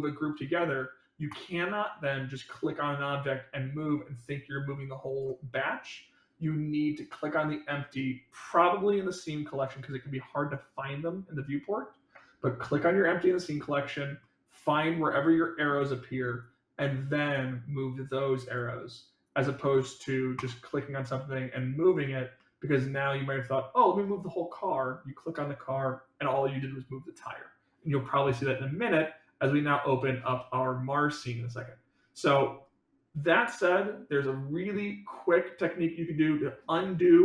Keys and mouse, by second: 0.0-0.6 middle drag, 1.2 click, 2.9-5.1 drag, 7.0 click, 14.1-15.6 middle drag, 16.3-18.5 drag, 19.3 click, 20.3 click, 21.5 click, 22.3 middle click.